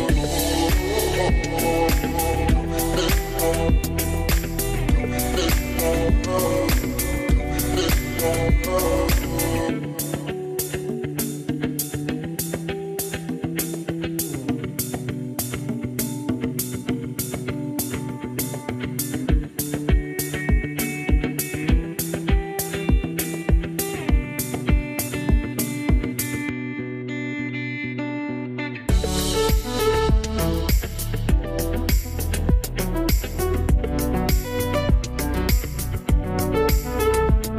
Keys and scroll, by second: 12.0 Right, 12.5 Right, 14.0 Left, 14.5 Right, 17.9 Right, 19.2 Right, 22.5 Right, 23.5 Left, 29.7 Right, 34.9 Right.